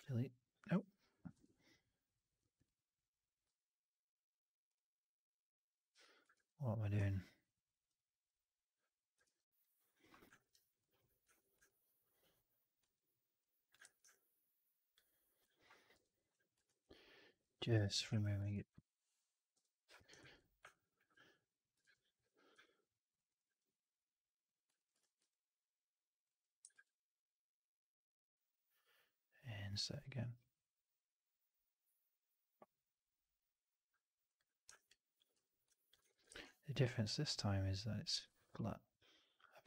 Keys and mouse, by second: 0.0 ctrl+BackSpace, 1.2 Delete, 3.3 Delete, 6.4 ctrl+z, 9.3 ctrl+BackSpace, 10.4 alt+right click, 10.7 alt+click, 11.3 1, 11.5 alt+click, 12.9 alt+c, 13.3 alt+click, 13.7 shift+x, 14.0 alt+click, 15.8 Up, 16.7 alt+c, 17.6 Up, 18.5 alt+c, 19.4 Up, 20.2 alt+c, 20.6 alt+click, 21.8 ctrl+BackSpace, 22.5 2, 23.0-24.5 drag, 24.6 alt+click, 24.9 shift+x, 25.2 alt+click, 26.6 shift+Tab, 34.6 alt+right click, 34.7 alt+click, 36.0 1, 36.2 shift+x, 36.9-39.6 drag.